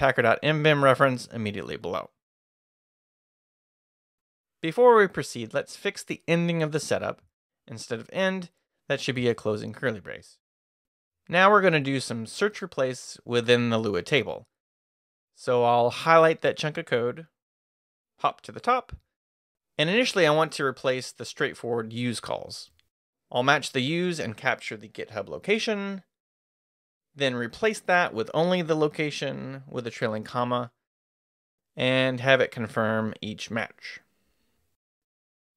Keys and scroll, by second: 1.0-3.3 typing, 4.4 k, 4.8 h, 5.9 shift+5, 7.2-8.5 typing, 9.5 shift+], 10.3 shift+Escape, 16.4-17.7 typing, 19.0 o, 22.1-28.3 typing, 29.5-31.4 typing, 32.2 Return, 33.2 y, 34.8 y.